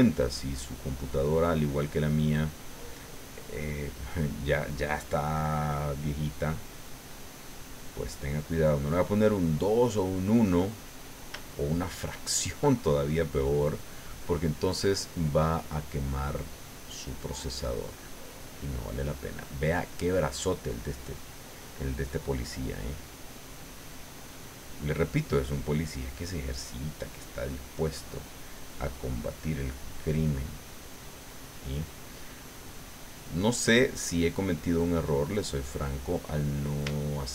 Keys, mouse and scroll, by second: 0.4-1.7 middle drag, 1.8-3.0 middle drag, 3.4-6.5 drag, 6.5-8.0 drag, 8.0-9.3 middle drag, 9.6-11.3 drag, 11.4 shift+middle click, 12.5 shift+click, 14.2 click, 14.7 middle click, 16.1 click, 17.1-18.4 middle drag, 18.5 middle click, 19.4 middle click, 20.3 middle click, 21.3 middle click, 22.2 middle click, 23.4 click, 24.9 middle click, 25.8 middle click, 26.6 middle click, 27.6 middle click, 28.6-30.3 drag, 31.2 middle click, 31.8 middle click, 32.6-35.8 drag, 35.9 middle click, 36.9 shift+middle click.